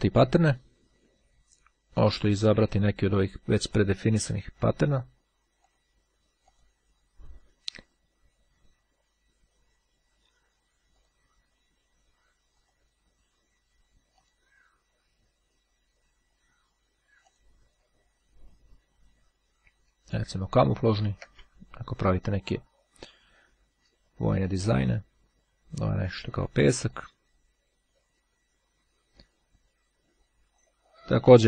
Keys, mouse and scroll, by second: 2.6 click, 3.7 click, 5.7 click, 6.5 click, 10.8 click, 12.7 click, 14.3 click, 17.4 click, 19.9-20.5 ctrl+scroll up 2, 22.3 click, 24.1-25.3 drag, 26.9 click, 28.8-31.3 scroll up 1, 31.3-31.4 scroll up 1.